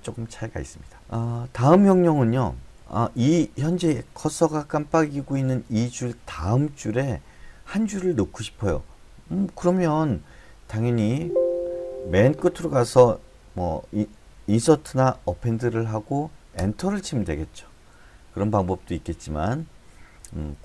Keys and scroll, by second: 1.0 Escape, 4.5-5.6 Left, 9.9-11.1 Right, 15.6 a, 16.6 Return, 18.8 Escape, 20.2 d, 20.5 d.